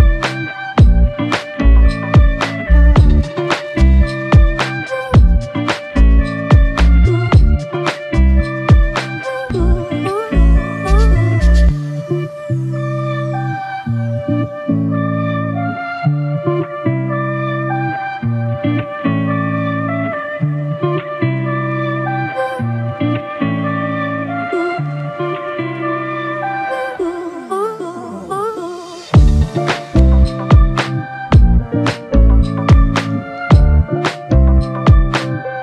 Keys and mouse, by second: 5.8 double click, 13.6 typing, 17.2 double click, 28.5 f, 29.7 ctrl+alt+click, 32.9 double click.